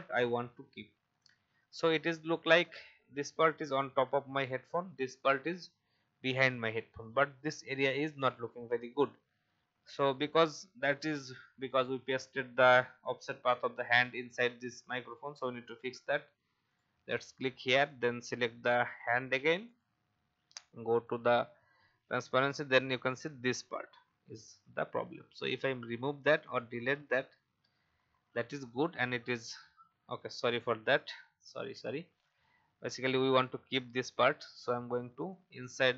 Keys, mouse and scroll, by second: 0.0 alt+scroll up 1, 1.1-1.4 alt+scroll down 1, 16.7 click, 22.0-24.1 drag, 27.4 Delete, 30.4 ctrl+z, 31.4 ctrl+z, 32.2 click.